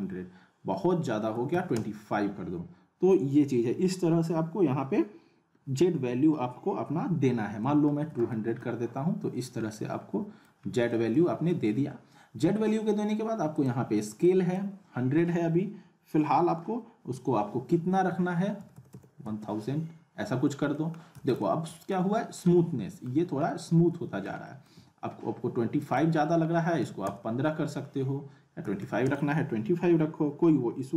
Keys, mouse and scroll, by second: 7.6 middle click, 8.0 z, 8.3 alt+middle click, 8.8-9.3 scroll up 1, 9.7-10.7 alt+middle click, 10.6 scroll up 2, 10.9-11.5 alt+middle drag, 13.5 click, 20.7 middle click, 21.1 z, 21.4-22.0 alt+middle click, 22.1-22.4 scroll up 1, 22.6-23.1 alt+middle click, 23.2 scroll up 1, 23.4-24.4 alt+middle click, 25.8 click.